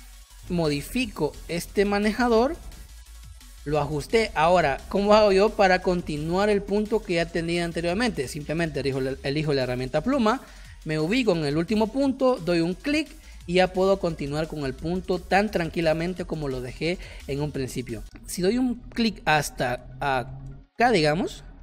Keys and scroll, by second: 3.3 space, 4.4 space, 9.8 p, 17.7 space, 18.8 space, 20.5 space.